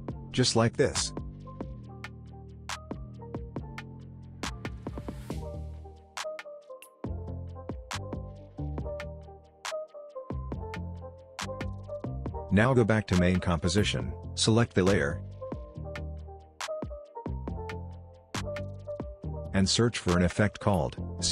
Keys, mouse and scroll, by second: 0.5-1.3 scroll down 1, 1.3-1.9 scroll up 1, 1.9-3.4 scroll down 1, 3.4-4.6 drag, 8.7 click, 14.0 click, 16.2-16.7 scroll down 1, 16.7-18.1 scroll up 1, 18.1 click, 20.7 c, 20.9 c.